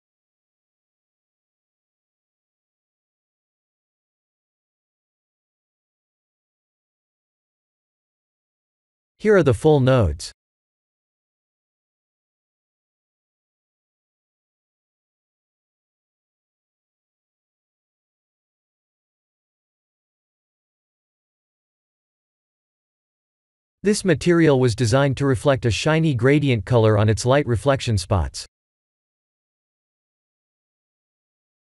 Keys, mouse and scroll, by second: 0.9-1.4 scroll up 4, 1.5 shift+middle click, 4.1 click, 7.2 shift+middle click, 24.3 ctrl+space, 26.3 middle click.